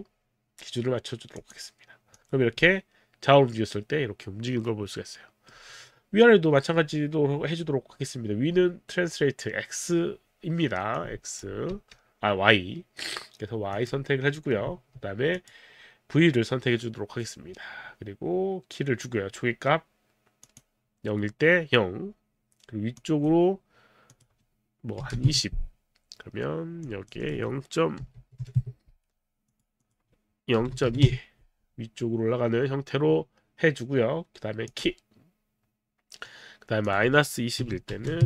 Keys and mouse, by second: 1.3 click, 2.2 click, 2.6 middle click, 10.9 click, 11.7 z, 13.7 click, 15.3 click, 20.5 click, 23.0 click, 24.1 click, 25.1 KP_2, 25.2 KP_0, 25.3 Return, 26.8 click, 27.2 right click, 28.0 KP_0, 28.2 KP_Decimal, 28.4 KP_2, 29.2 Return, 29.2 KP_2, 29.5 click, 29.8 click, 30.5 click, 30.6 KP_0, 30.7 KP_Decimal, 30.8 KP_2, 31.1 Return, 34.7 click, 36.9 click, 37.6 KP_Subtract, 38.0 KP_2, 38.1 KP_0.